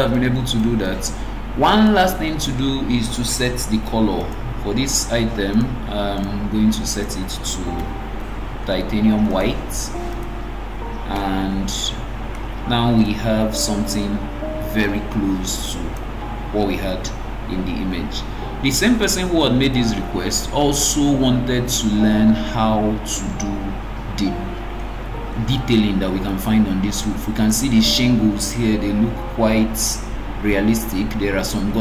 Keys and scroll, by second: 3.8 Escape.